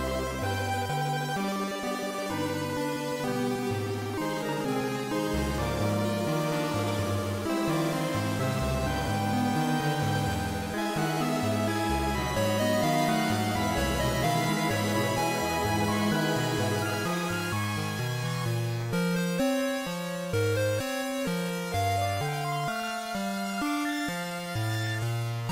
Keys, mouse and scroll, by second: 0.4 m, 4.3 z, 5.8-6.2 scroll down 1, 6.8 right click, 8.0-8.6 scroll down 1, 8.6-9.1 scroll down 1, 9.1-9.7 scroll down 3, 10.6 KP_7, 12.5 scroll down 2, 13.2-14.0 scroll down 3, 15.0 shift+d, 16.9 click, 18.4 shift+d, 23.3 click, 24.8 shift+d.